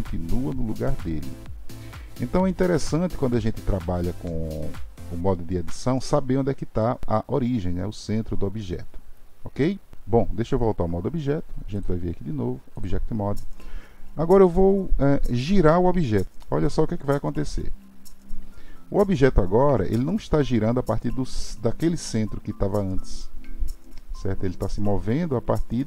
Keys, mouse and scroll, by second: 11.8-14.9 drag.